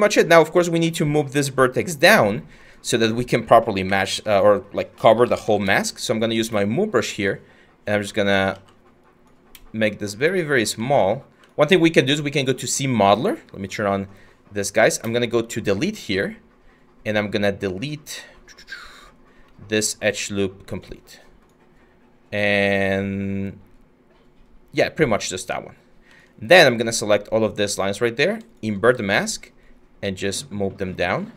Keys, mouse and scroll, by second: 3.5 q, 4.5-5.6 typing, 8.2 ctrl+z, 9.7 ctrl+z, 15.8-17.6 scroll, 18.2-19.1 scroll, 19.1-19.6 scroll, 19.6 scroll, 28.5 w.